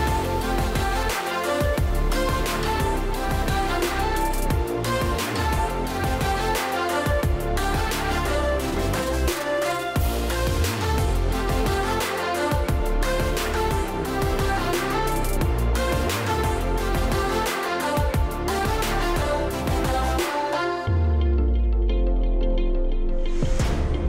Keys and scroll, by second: 4.5-5.5 space, 9.1-10.1 ctrl+space.